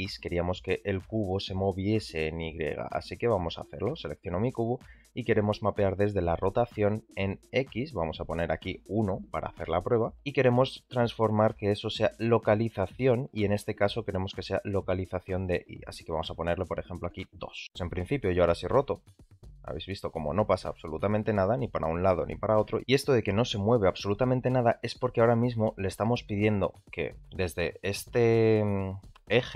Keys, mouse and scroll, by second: 0.8 click, 1.1 g, 6.5 click, 8.7-10.2 drag, 16.7 click, 18.1 r, 22.8 r, 26.0 shift+middle drag, 29.3 r.